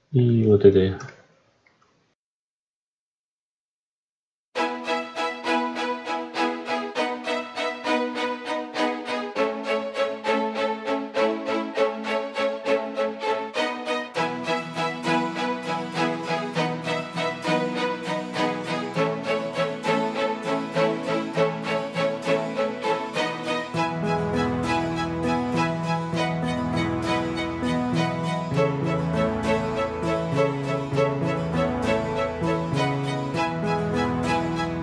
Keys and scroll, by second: 5.4 ctrl+z, 16.6 ctrl+space, 20.7 ctrl+z, 25.1 Return, 25.8 ctrl+r, 29.2 F9, 31.7 Return.